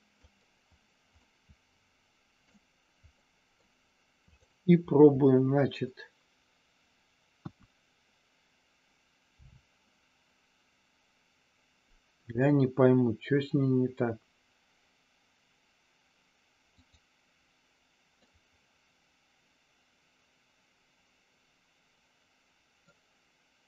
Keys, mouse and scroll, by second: 1.2 scroll up 1, 1.3-2.5 middle drag, 3.2 middle click, 4.3 click, 7.5 KP_1, 9.3 r, 16.8 click, 18.2-22.9 middle drag.